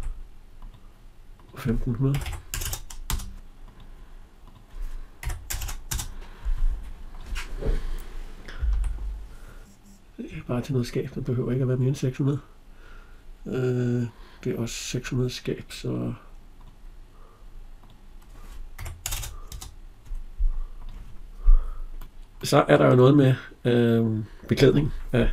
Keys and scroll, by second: 2.9 Return, 8.5 Escape, 19.4 Return.